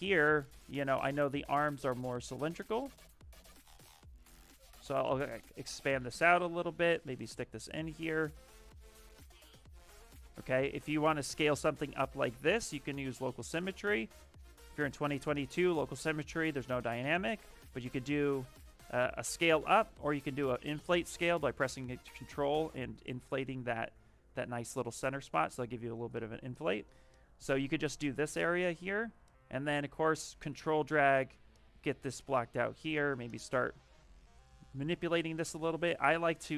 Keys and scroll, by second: 6.4 w, 10.1 ctrl+z, 25.8 ctrl+z, 34.9 q.